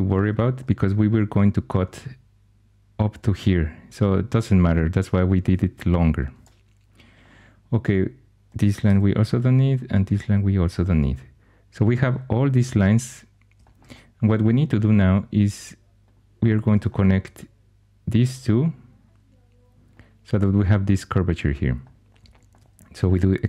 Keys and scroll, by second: 8.8 x, 9.9 x.